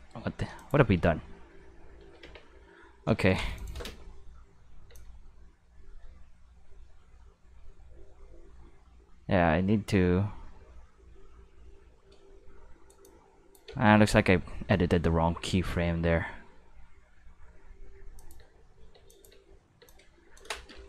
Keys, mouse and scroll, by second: 0.1-0.6 shift+middle drag, 0.6 click, 0.8 space, 2.0 space, 2.2 q, 3.6 click, 3.8 space, 4.9 space, 4.9-12.9 drag, 13.0 click, 13.7 ctrl+z, 13.8 ctrl+z, 14.0 ctrl+z, 14.2 ctrl+z, 14.4 ctrl+z, 14.8 ctrl+z, 15.3 ctrl+z, 16.8 middle click, 17.0 middle click, 17.5-19.8 typing, 18.2 click, 19.1 click, 19.9 click.